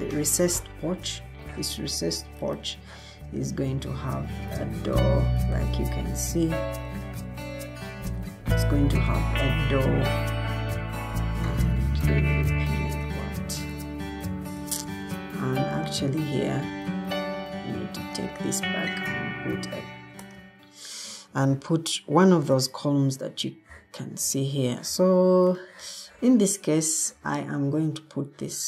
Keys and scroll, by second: 7.0 Escape, 17.3 Escape, 20.1 Escape, 20.1 alt+g, 21.0 Escape, 26.0 Escape.